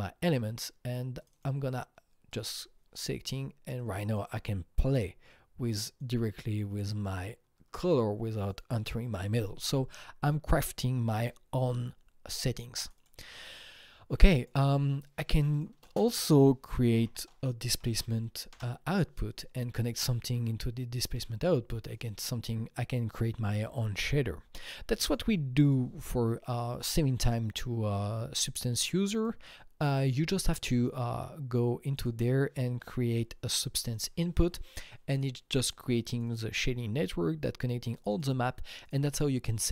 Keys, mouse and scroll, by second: 0.4 scroll down 1, 1.2 click, 1.2 scroll down 1, 1.3 double click, 2.3 click, 3.8-6.0 drag, 6.0 click, 6.8-8.5 drag, 8.5-11.1 drag, 13.0 double click, 13.7-15.5 drag, 15.5 click, 15.8 ctrl+space, 16.4-17.6 typing, 17.7 Down, 17.9 Down, 18.5 Return, 24.9 click, 25.0 double click, 25.6 click, 26.8 click, 29.2 click, 31.9 click, 33.9-35.4 drag, 36.1 click, 36.3 double click, 38.0 click, 38.1 double click, 38.8 click.